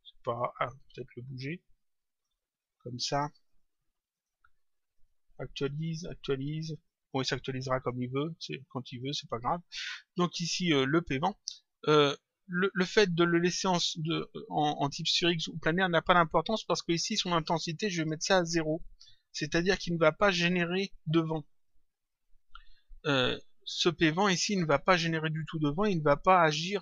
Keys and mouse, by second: 0.2 click, 1.4 click, 3.4 click, 4.1 click, 6.6 click, 8.9 click, 10.8 click, 12.0 click, 17.9 click, 21.5 click.